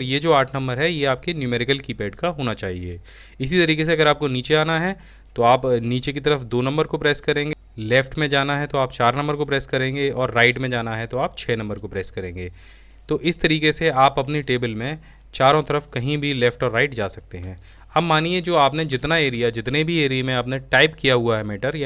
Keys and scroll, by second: 7.8 ctrl+shift+4, 10.5 ctrl+shift+6.